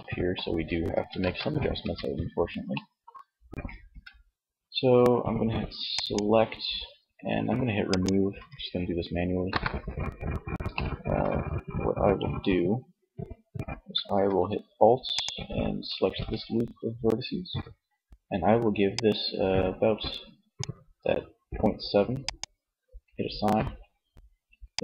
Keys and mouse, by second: 0.3 ctrl+z, 1.0 Tab, 2.9 a, 6.5 click, 7.0-8.4 drag, 8.4 KP_1, 20.0-21.6 middle drag, 23.2 middle click.